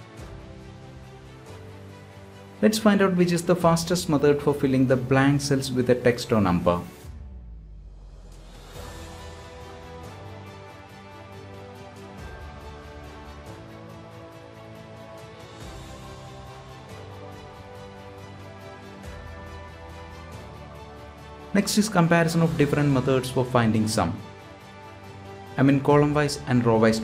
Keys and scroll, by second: 10.4 ctrl+g, 17.9 ctrl+Return.